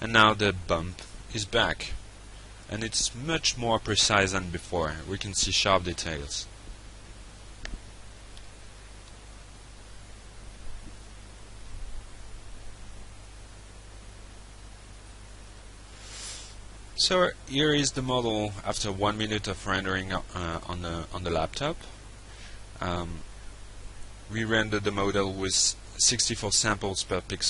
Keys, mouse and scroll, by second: 12.5 click, 13.8 alt+Tab.